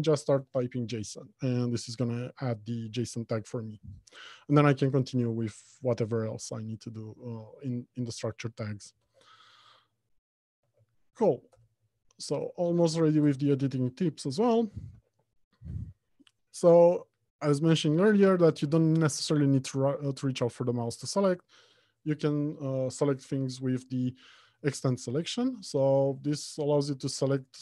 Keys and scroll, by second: 0.7 Return, 9.3 alt+shift+Insert, 9.6 Escape, 10.9 alt+Home, 11.4 Left, 11.9 Return, 22.4 ctrl+w.